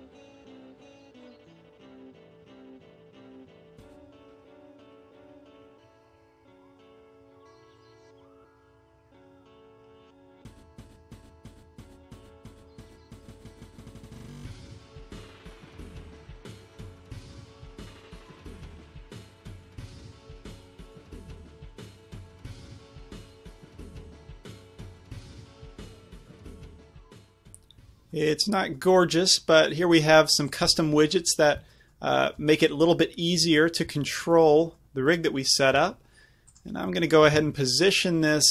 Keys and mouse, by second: 0.3 z, 0.6-1.4 drag, 2.6-4.2 drag, 2.9 z, 8.3 ctrl+z, 9.8 m, 10.9 z, 11.2 click, 11.9 alt+h, 12.5-14.9 drag, 14.5 m, 15.7-18.1 drag, 15.7 z, 16.1 a, 17.4-19.4 typing, 17.5 right click, 21.9-23.4 typing, 23.7 click, 24.1 right click, 24.5 r, 25.3-26.1 drag, 25.8 a, 26.1 a, 30.6-34.8 middle drag, 34.8 g, 35.8 g, 37.4-38.5 drag, 37.4 r.